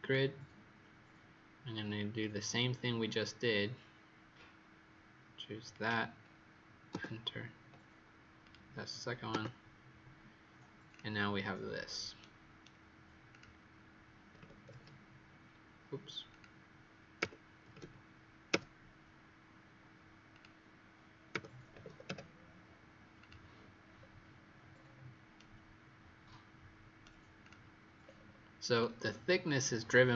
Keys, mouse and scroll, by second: 6.8 Return, 8.3 click, 9.3 Return, 10.8 click, 11.5-12.1 scroll down 1, 12.1-12.5 scroll down 2, 13.2 click, 14.3 KP_2, 14.6 Return, 14.6 KP_0, 16.2 click, 17.1 KP_Subtract, 17.6 KP_4, 17.6 KP_0, 18.4 Return, 20.2 click, 21.2 KP_Subtract, 21.6 KP_2, 21.7 KP_0, 23.1 click, 23.9-24.5 scroll down 1, 24.6-25.3 scroll up 5, 25.3 right click, 27.4 click, 27.9-28.7 scroll down 2, 28.7-29.5 scroll down 2, 29.5-29.9 scroll up 2.